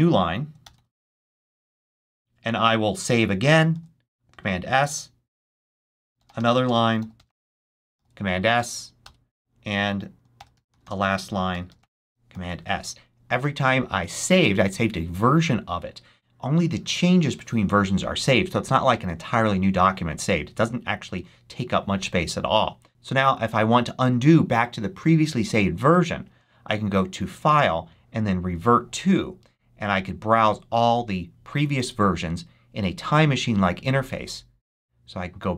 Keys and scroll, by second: 0.3-1.9 typing, 3.6 super+s, 5.5-7.6 typing, 7.8 super+s, 8.9 super+Return, 10.0-12.2 typing.